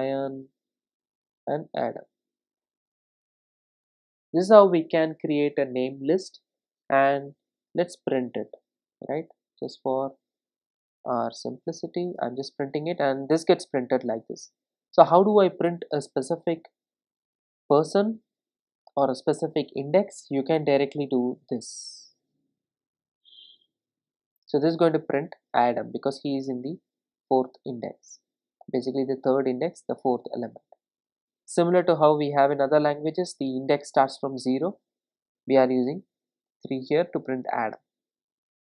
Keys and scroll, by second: 8.3 Return, 12.0 ctrl+r, 18.2 super+d, 20.3 super+d, 24.4 ctrl+r.